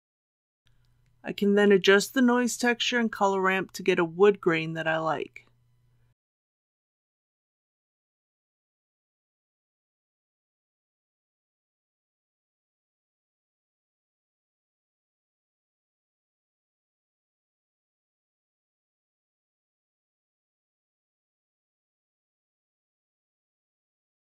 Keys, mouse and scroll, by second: 3.2 KP_4, 3.5 KP_0, 7.0-9.3 drag, 9.3 KP_3, 13.9-24.2 drag.